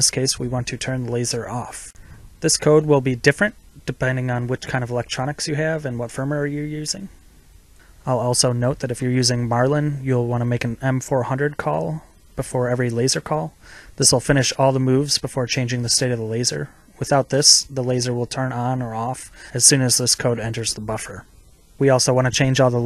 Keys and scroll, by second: 1.5 ctrl+v, 16.6 ctrl+c, 18.7 ctrl+v.